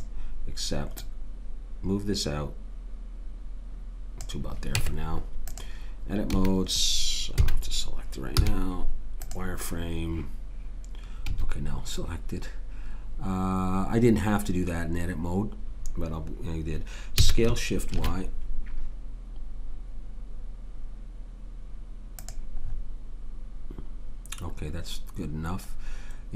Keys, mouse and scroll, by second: 4.7 Tab, 6.3 a, 7.4 a, 8.3 z, 11.3 a, 17.2 s.